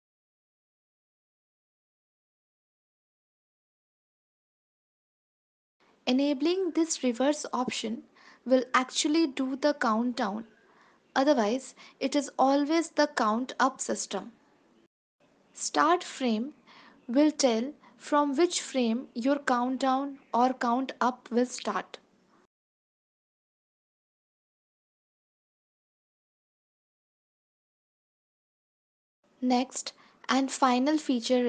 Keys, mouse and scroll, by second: 0.2 click, 0.4 click, 0.8 click, 1.9 click, 2.3 space, 8.4 click, 8.9 ctrl+s, 8.9 space, 11.2 click, 11.2 space, 16.1 click, 18.6 click, 21.4 ctrl+s, 22.3 click, 23.7 space, 28.7 space.